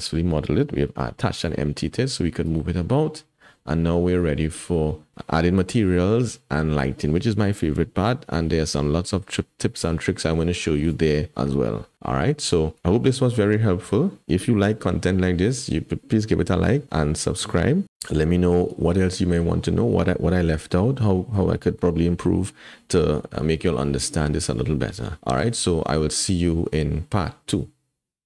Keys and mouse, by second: 1.6 g, 2.9-3.6 drag, 4.2 click.